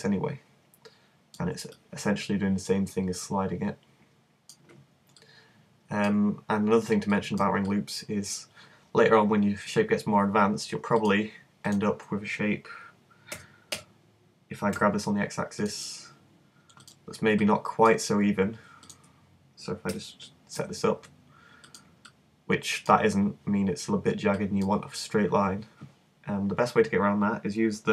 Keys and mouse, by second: 0.5 click, 1.8-3.2 drag, 7.0 middle click, 13.4 g, 15.7-17.3 drag, 19.9 g.